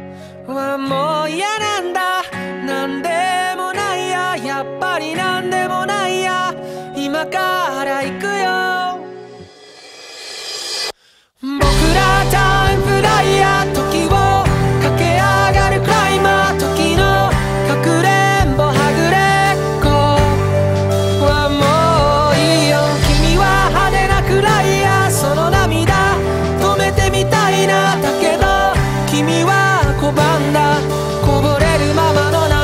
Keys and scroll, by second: 0.2 ctrl+z, 2.0 ctrl+z, 4.7 ctrl+z, 5.0 ctrl+z, 6.6 ctrl+z, 6.8 ctrl+z, 7.5 ctrl+z, 8.2 ctrl+z, 8.7 ctrl+z, 9.8 ctrl+z, 10.1 ctrl+z, 10.3 ctrl+z, 10.9 ctrl+z, 12.5 ctrl+z, 14.0 ctrl+z, 14.4 ctrl+z, 14.8 ctrl+z, 15.0 ctrl+z, 16.8 ctrl+z, 17.7 ctrl+z, 19.2 ctrl+z, 19.8 ctrl+z, 20.0 ctrl+z, 20.3 ctrl+z, 21.6 ctrl+z, 23.2 ctrl+z, 24.7 ctrl+z, 25.6 ctrl+z, 26.5 ctrl+z, 26.8 ctrl+z, 28.8 ctrl+z, 29.0 ctrl+e, 30.0 ctrl+d, 30.1 ctrl+e, 30.5 ctrl+z, 31.3 ctrl+z, 31.7 ctrl+z.